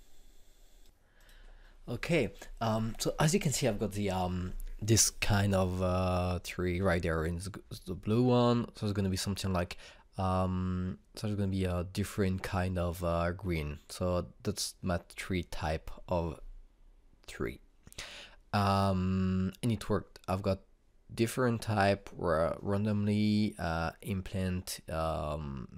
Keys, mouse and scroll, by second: 1.8 click.